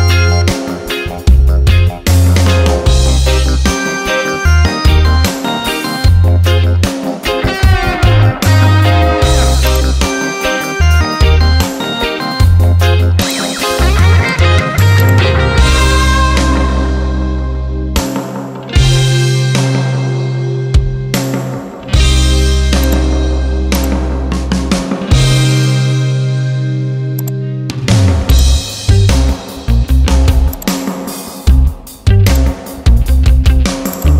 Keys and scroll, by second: 2.4 d, 3.5 Caps_Lock, 4.2 r, 4.7 i, 5.5 b, 6.3 e, 7.3 l, 11.1 ctrl+t, 18.3 Return, 20.1 ctrl+a, 21.9 v, 25.0 ctrl+d.